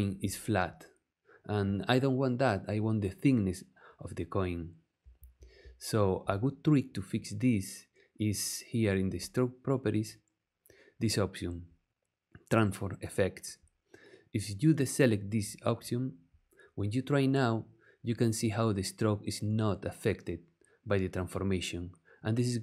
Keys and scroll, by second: 5.1 super+z.